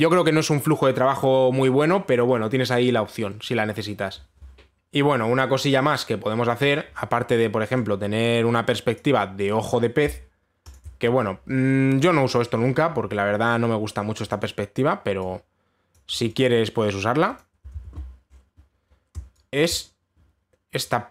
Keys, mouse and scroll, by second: 4.7 click, 6.3 click, 7.3 click, 9.6 click, 11.4 shift+click, 13.0 click, 13.9-14.5 scroll, 14.5 scroll, 14.6 scroll down 1, 15.0-16.6 scroll, 16.6 click, 17.0 click, 18.0 click, 18.4 ctrl+z, 18.9 scroll up 1, 19.5 scroll up 4, 19.9 scroll down 1, 20.3 click, 20.4 click, 20.5-21.1 scroll down 1.